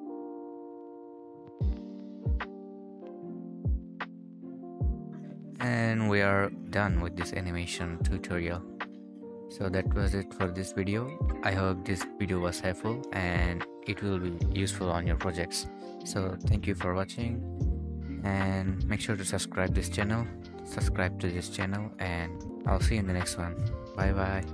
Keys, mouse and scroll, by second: 1.5 double click, 4.4 space, 9.0 Escape, 10.9 0, 14.8 Escape.